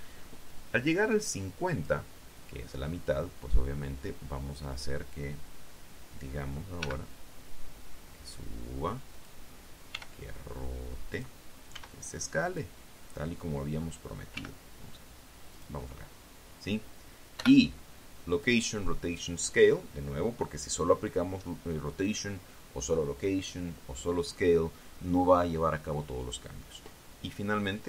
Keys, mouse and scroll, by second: 1.9 click, 7.6 g, 10.0 click, 10.8 r, 12.0 click, 12.6 s, 13.3 click, 15.2 g, 16.4 click, 18.2 i, 19.2 click.